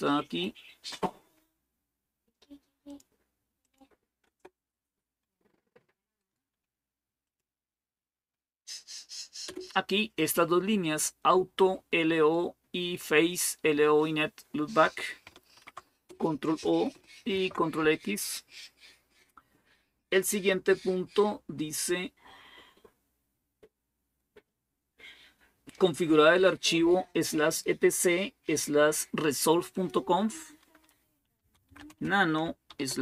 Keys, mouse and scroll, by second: 2.7 click, 3.5 click, 4.1 Return, 6.0 right click, 7.1 click, 7.6 click, 9.3 Return, 15.4 ctrl+o, 15.9 Return, 17.1 ctrl+x, 20.2 click, 20.8-21.9 scroll down 1, 21.9-22.4 scroll down 1, 29.5 click, 31.0-33.0 typing.